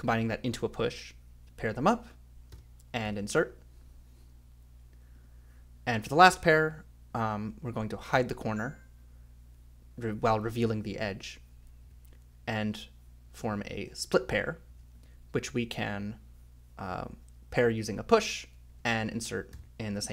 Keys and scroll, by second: 2.5 j, 3.0 k, 5.9 ;, 7.1 a, 8.1 k, 11.8 f, 12.5 i, 14.4-15.4 typing, 17.6 i, 18.7 j, 19.5 k.